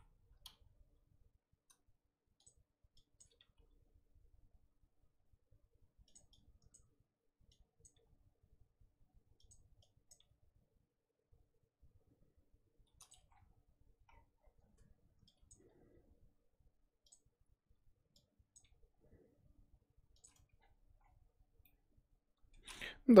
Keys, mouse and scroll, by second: 0.5 g, 3.2 click, 3.4 g, 6.7 click, 7.8 click, 7.9 g, 10.1 click, 10.2 g, 13.1 Tab, 13.3-14.1 scroll down 1, 14.1 scroll down 6, 14.3-15.3 scroll up 4, 14.6 Tab, 15.5 click, 15.6 g, 18.5 click, 18.6 g, 20.3 Tab, 20.5-21.6 scroll down 10, 21.6-22.6 middle drag, 22.6-23.2 scroll up 4.